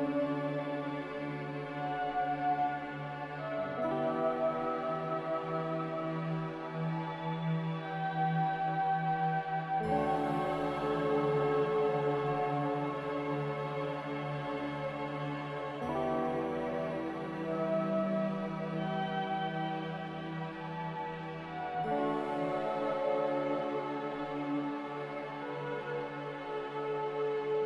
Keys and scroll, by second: 1.4 ctrl+z.